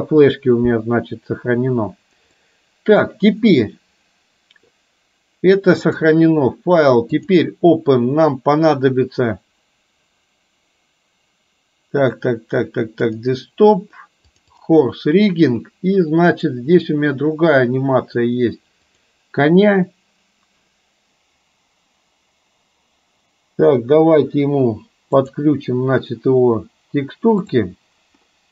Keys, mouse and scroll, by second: 2.4 middle click, 6.1-7.6 drag, 25.3 click.